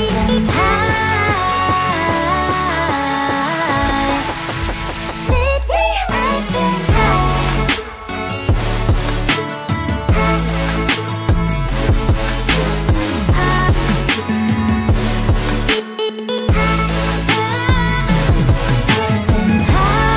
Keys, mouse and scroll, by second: 9.2 alt+scroll up 1, 9.4 alt+scroll down 1, 9.6 alt+scroll up 1, 10.8 shift+click, 15.4 alt+scroll down 1.